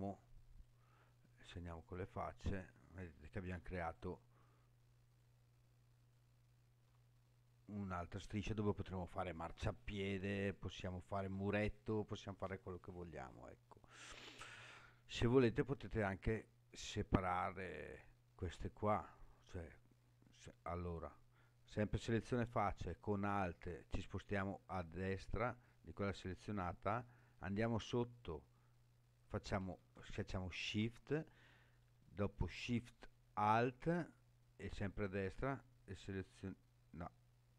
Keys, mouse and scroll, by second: 0.5 click, 1.8 click, 2.8 click, 3.8 alt+click, 5.0 alt+click, 6.0 alt+click, 20.8 click, 25.1 alt+click, 30.7 shift+click, 34.9 alt+shift+click, 35.8 alt+shift+click, 36.9 alt+shift+click.